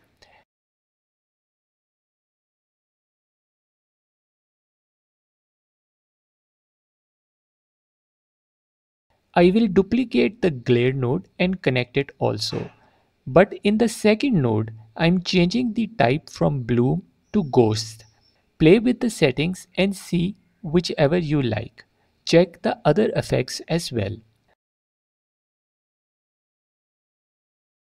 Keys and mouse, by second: 1.8 click, 2.5-3.5 drag, 4.1-6.0 drag, 6.1 alt+drag, 7.7 click, 8.2 click, 8.9 click, 9.3-9.9 drag, 11.8 shift+d, 15.7-18.3 drag, 20.1 alt+click, 20.7-21.1 middle drag, 24.6 click, 24.7 middle click, 25.6-26.7 shift+drag, 27.0 shift+click, 27.7 shift+click.